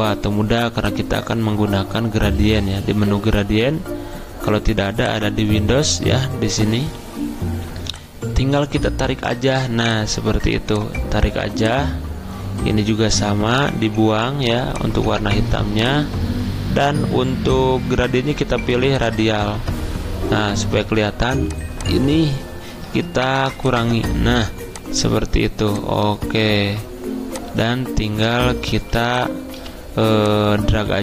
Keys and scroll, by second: 28.7-29.6 typing.